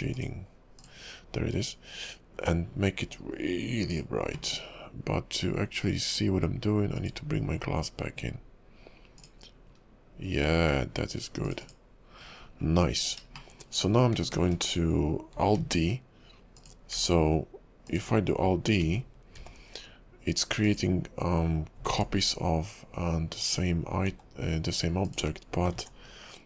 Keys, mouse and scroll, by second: 7.1 click, 8.4-9.2 scroll down 4, 9.2 click, 9.9-10.7 scroll down 2, 11.5 click, 11.6 click, 12.4-12.9 scroll up 9, 13.5 shift+middle click, 15.7 alt+d, 17.0 s, 19.5 alt+d, 22.0 alt+d, 24.1 s, 25.9 alt+d.